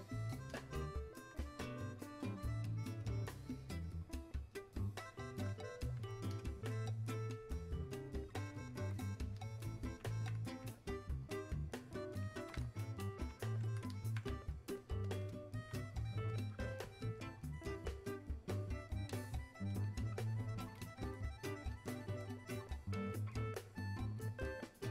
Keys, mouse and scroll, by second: 19.7-24.9 drag.